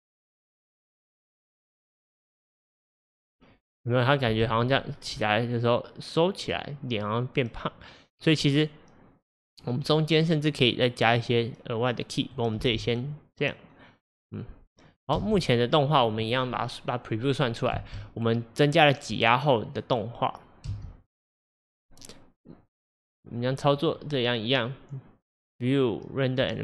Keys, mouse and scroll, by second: 4.4 space, 4.9-8.0 drag, 12.6 space, 15.2 space, 17.8 space, 20.7 space, 23.8-26.6 drag.